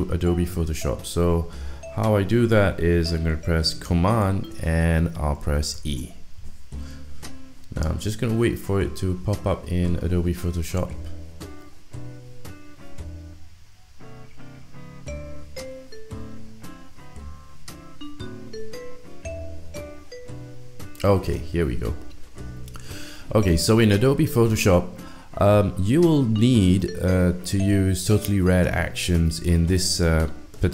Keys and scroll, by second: 5.8 super+e.